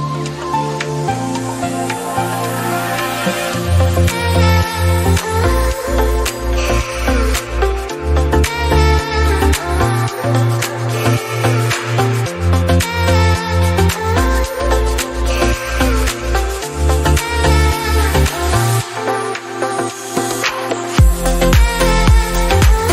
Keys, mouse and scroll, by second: 0.6 scroll up 1, 0.7 middle click, 1.6 KP_Decimal, 2.4 click, 3.2 /, 3.7 shift+middle click, 4.5 click, 4.9 Tab, 5.2-5.5 scroll down 2, 5.5 click, 5.8-6.4 scroll up 2, 6.4 click, 6.9 right click, 7.1-7.5 scroll down 2, 7.5 click, 7.8 middle click, 8.3-9.9 scroll up 7, 8.6 middle click, 9.0 Tab, 9.9 ctrl+r, 10.7 Tab, 10.9 scroll down 3, 11.1 middle click, 11.4-11.8 scroll up 2, 11.8 Tab, 13.0 ctrl+r, 14.4 Tab, 14.7 scroll down 1, 14.9 middle click, 15.7-16.0 scroll down 1, 16.0-17.8 middle drag, 17.8-18.6 scroll down 3, 18.6-19.9 drag, 21.4 shift+middle click, 21.4 click, 21.7 click, 22.8 alt+g.